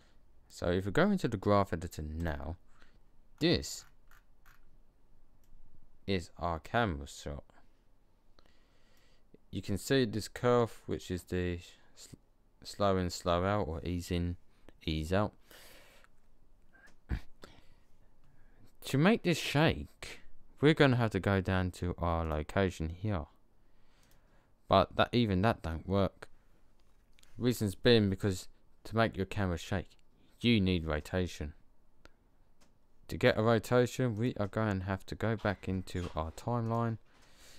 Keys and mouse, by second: 1.1 click, 2.4-2.8 drag, 3.2 middle click, 4.4 middle drag, 4.5 click, 7.1 middle click, 7.3 middle click, 7.6 middle click, 7.8 middle click, 22.1 click, 35.1-36.4 middle drag.